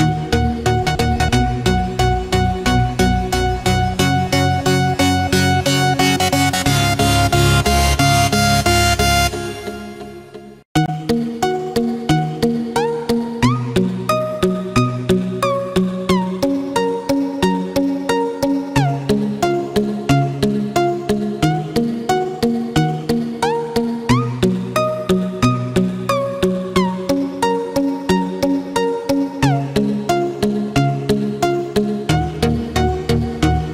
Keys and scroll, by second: 0.8 ctrl+=, 7.4 ctrl+=, 29.3 ctrl+-, 30.1 ctrl+=, 32.7 ctrl+-, 33.6 ctrl+z.